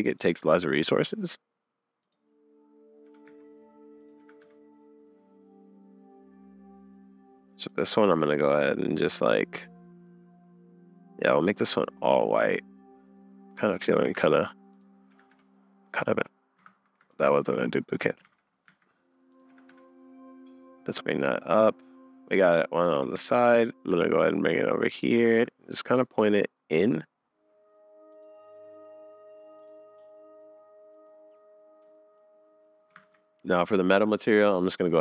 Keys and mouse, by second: 0.4 r, 3.1 g, 4.2 r, 11.5 middle click, 13.0 middle click, 13.9 shift+d, 15.1 r, 17.0 x, 17.9 click, 18.2 alt+d, 19.5 r, 21.4-22.9 drag, 23.0 g, 25.2 r, 30.4 click, 31.8 click, 33.0 super+s, 34.9 click.